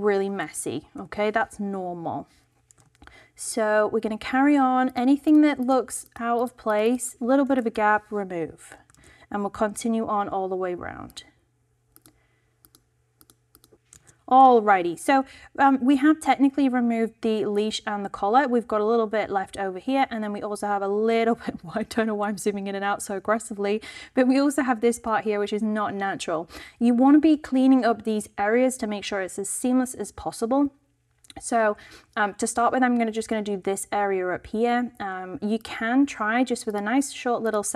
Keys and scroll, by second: 0.3 shift+BackSpace, 0.9 shift+Return, 2.8 super+d, 7.5 shift+BackSpace, 7.6 shift+Return, 8.9 super+d, 13.0 shift+BackSpace, 13.1 shift+Return, 13.7 super+d, 14.1 super+d.